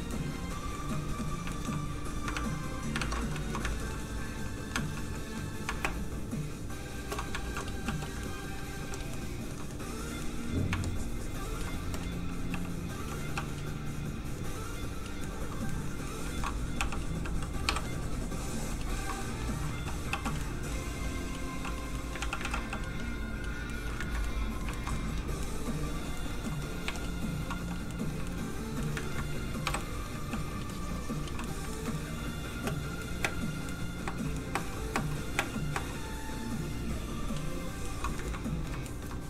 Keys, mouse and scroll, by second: 1.5 shift+middle click, 2.2 ctrl+middle click, 2.3 ctrl+Tab, 3.3 shift+Tab, 3.4 shift+middle click, 3.6 ctrl+middle click, 4.0 middle click, 4.8 shift+middle click, 5.8 shift+middle click, 5.8 shift+space, 7.6 f, 7.8 f, 8.0 click, 8.2 middle click, 8.8 f, 9.1 middle click, 9.4 shift+middle click, 9.8 middle click, 10.8 shift+click, 11.8 click, 11.9 click, 12.5 g, 12.8 f, 12.9 click, 13.5 click, 14.4 click, 15.2 middle click, 16.2 shift+middle click, 16.8 f, 16.9 click, 17.6 i, 17.8 click, 19.0 middle click, 19.7 g, 20.1 f, 20.3 click, 20.4 middle click, 21.0 click, 21.9 middle click, 22.2 ctrl+z, 22.4 ctrl+z, 22.6 f, 22.7 click, 23.7 middle click, 24.0 ctrl+middle click, 24.2 middle click, 24.3 middle click, 24.7 shift+middle click, 25.0 middle click, 25.1 middle click, 26.9 shift+click, 27.5 click, 27.6 f, 27.7 click, 27.9 middle click, 28.3 shift+middle click, 28.8 middle click, 29.0 ctrl+middle click, 29.6 ctrl+i, 29.8 middle click, 30.3 f, 30.5 click, 31.4 middle click, 31.6 ctrl+middle click, 32.5 ctrl+space, 33.0 middle click, 33.2 space, 33.7 middle click, 34.0 space, 34.3 middle click, 34.5 space, 37.0 click, 37.0 space, 37.8 middle click, 38.3 middle click, 38.9 shift+middle click.